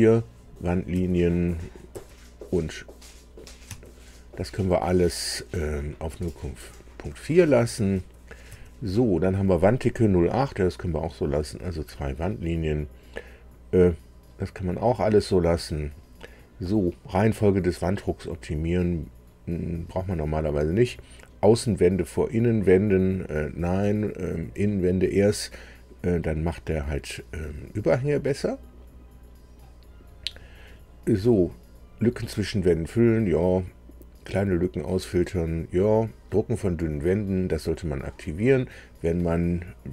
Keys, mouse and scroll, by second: 0.9 Tab, 1.9 Tab, 3.6 Tab, 7.4 Tab, 8.4 Tab, 9.0 Tab, 18.5 click, 19.9 click, 28.0-30.3 drag, 36.9 click.